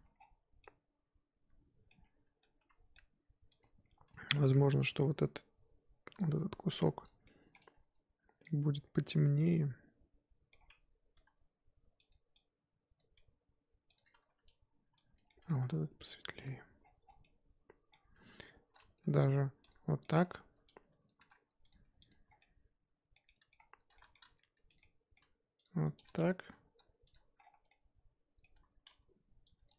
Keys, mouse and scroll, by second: 0.1-0.6 scroll down 1, 0.6-2.0 middle drag, 2.0 scroll up 2, 2.2 Tab, 2.4-3.0 middle drag, 3.0-3.6 scroll up 2, 3.6 click, 5.0 l, 11.1 g, 12.9 click, 13.1 g, 14.3 a, 15.1 click, 15.6 g, 16.6 Tab, 16.8-17.2 scroll down 10, 17.2-17.9 middle drag, 17.9-19.0 scroll up 4, 18.1 Tab, 19.0 g, 20.0 middle drag, 20.2-20.5 scroll up 2, 20.5 Tab, 21.0 Tab, 21.2 3, 21.7 click, 22.2 scroll down 3, 22.4-23.5 middle drag, 23.5-23.9 scroll up 1, 23.9-24.7 shift+middle drag, 24.7 click, 24.8-25.6 middle drag, 25.6 ctrl+click, 26.4 g, 27.1 Tab, 27.4 scroll down 7, 27.7-28.5 middle drag, 28.5 Tab, 28.9 a, 29.6 click.